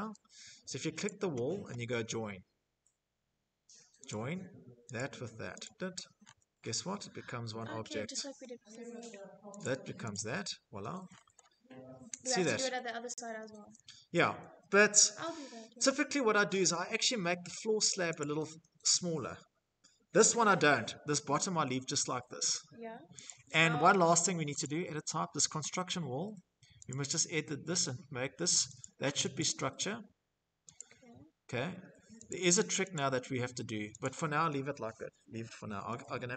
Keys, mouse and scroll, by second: 2.8 click, 3.7 click, 4.3 click, 4.9-5.6 scroll, 6.2-6.9 scroll, 7.4 scroll, 8.3 click, 8.8 click, 9.7-10.1 scroll, 11.0-12.6 scroll, 12.6 Escape, 13.8-14.6 typing, 14.9 scroll, 15.9 scroll, 16.3 z, 16.9 click, 19.2-19.8 scroll, 19.8 Escape, 21.9 middle click, 21.9 click, 23.3 click, 25.6 click, 27.5 click, 28.1 click, 29.4 click, 30.9 click, 31.6 click, 32.2-32.6 scroll, 32.7 click, 32.9 scroll, 33.8-34.3 scroll, 35.8 click.